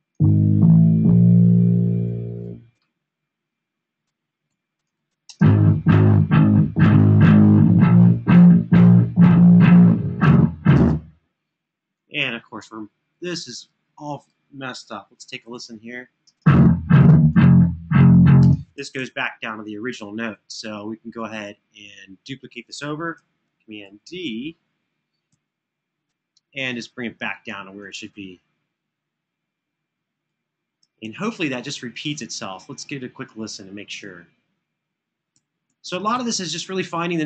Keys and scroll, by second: 3.0 Home, 3.2 Home, 3.5 Home, 3.7 Home, 4.3 Home, 5.0 space, 12.2 space, 15.2 alt+f, 16.1 space, 18.8 super+[, 19.1 super+[, 23.5 super+f, 25.0 super+d, 27.0 Escape, 30.8 super+[, 31.3 super+[, 34.8 Escape, 35.0 Escape, 35.4 Escape, 35.7 Escape, 36.1 Escape.